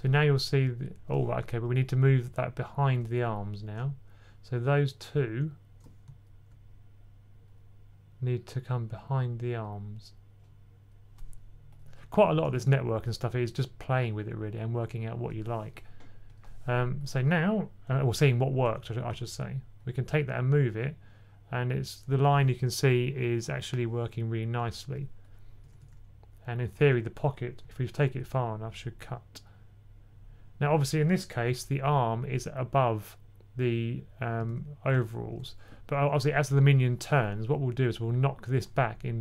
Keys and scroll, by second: 18.9 typing, 25.5 typing, 27.5-28.1 typing, 34.3 super+z.